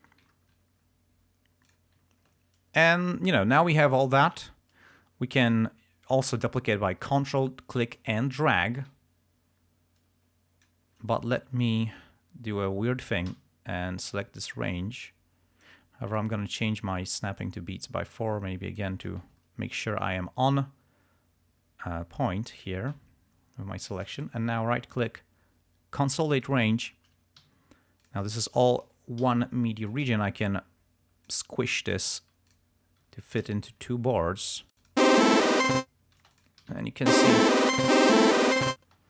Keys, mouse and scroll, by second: 0.6-1.1 ctrl+scroll down 6, 1.8 click, 2.1 ctrl+scroll down 2, 3.8 click, 7.6-11.0 ctrl+drag, 11.3 ctrl+scroll down 2, 11.5-11.8 ctrl+scroll up 2, 13.4 r, 14.3-16.0 drag, 16.3-17.7 drag, 18.2 click, 19.8 ctrl+scroll up 2, 20.8 ctrl+scroll up 2, 21.4-22.3 ctrl+scroll down 4, 23.1-23.6 ctrl+scroll up 2, 23.6 ctrl+scroll down 2, 24.3 ctrl+right click, 26.5 click, 27.5 g, 28.1 click, 29.4 t, 30.0-31.7 drag, 32.2 g, 32.6 click, 33.1 s, 33.4 shift+click, 33.6 shift+right click, 34.2 ctrl+shift+scroll up 3, 34.8 ctrl+click, 35.2 space, 36.3 space, 36.4 alt+click, 36.7 alt+d, 37.3 alt+space, 38.9 space.